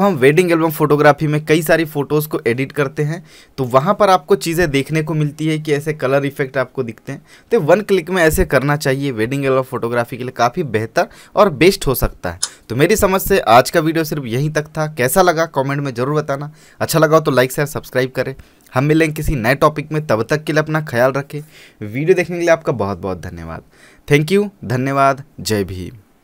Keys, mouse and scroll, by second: 1.1 v, 3.8 click.